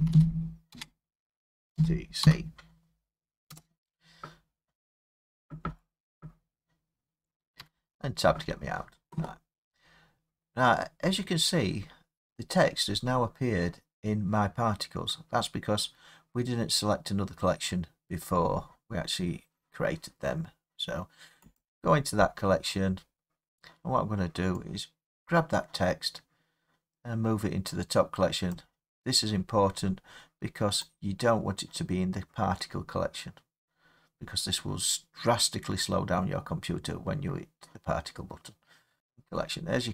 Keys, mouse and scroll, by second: 0.0-2.3 typing, 3.5 Return, 7.6 Tab, 9.7 scroll down 4, 10.8-11.8 scroll up 3, 11.8 scroll down 2, 12.9-14.5 scroll up 1, 14.5 scroll up 1, 15.3-16.9 scroll down 2, 18.4 middle click, 18.5 middle click, 21.6 click, 22.6-23.1 scroll, 28.5 click, 29.1-30.5 scroll, 30.5-33.5 scroll, 39.0 click, 39.4 middle click, 39.4 middle click, 39.8 middle click.